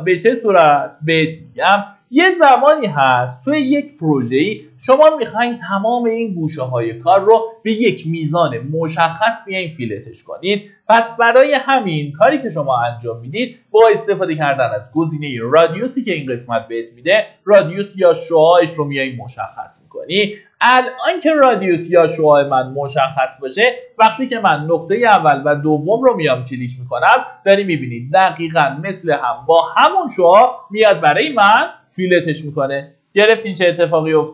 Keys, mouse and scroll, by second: 0.8 scroll down 1, 2.3 middle click, 4.9-5.5 scroll up 1, 15.2 click, 17.6 scroll down 1, 19.0 middle click, 19.7-20.2 scroll up 1, 22.4 click, 30.7-31.2 scroll down 1, 32.3 middle click.